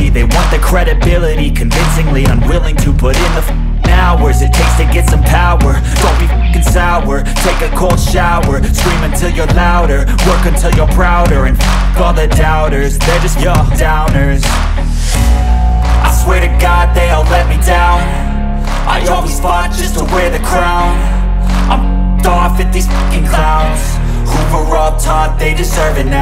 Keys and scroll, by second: 14.7 ctrl+r, 19.9 Escape.